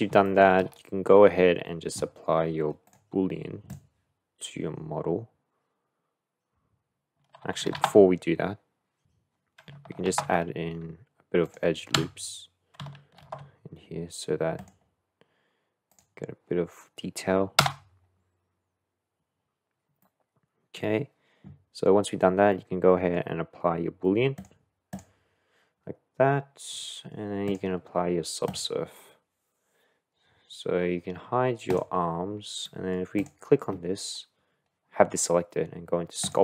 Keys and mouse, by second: 0.2 shift+middle drag, 3.0-6.5 drag, 10.1 ctrl+r, 12.1 Tab, 13.2 ctrl+r, 19.2 Tab, 20.0 click, 20.1 middle click, 20.4 click, 22.5-23.1 middle drag, 24.4-26.6 drag, 27.6-28.8 drag, 31.7 click, 32.6 middle click.